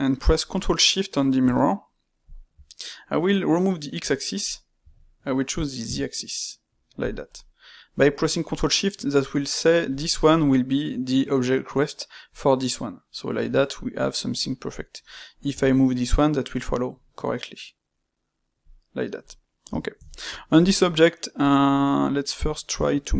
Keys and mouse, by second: 7.3-9.8 middle drag, 9.8 click, 12.2 click, 13.4-15.4 middle drag, 15.4 g, 19.2-20.5 middle drag, 20.5 click, 22.3 click.